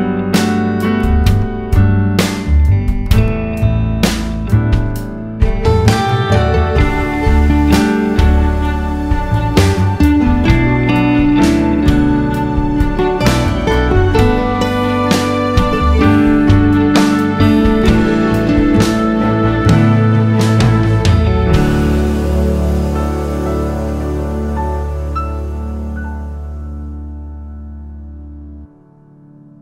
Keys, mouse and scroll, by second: 0.6 click, 1.6 click, 2.2-5.6 drag, 3.4 scroll down 1, 3.6 scroll up 1, 4.1 scroll down 1, 4.4 scroll up 1, 13.1 click, 13.6 click, 17.7-26.4 drag, 24.4 `, 24.9 scroll up 2, 25.1 alt+a, 25.2 `, 26.8 `, 28.2 Tab.